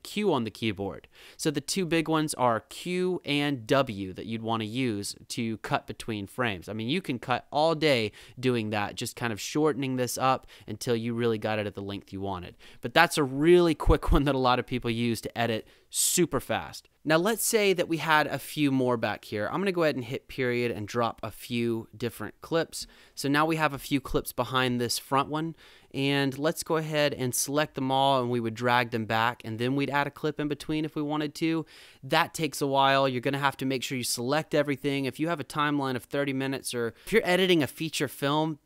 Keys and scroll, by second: 0.0 q, 1.8 super+z, 2.7 super+q, 3.7 w, 7.3 q, 8.2 w, 9.9 q, 10.3 w, 18.7 Down, 20.3 ●, 20.6 Down, 20.8 ●, 23.0 -, 25.1 =.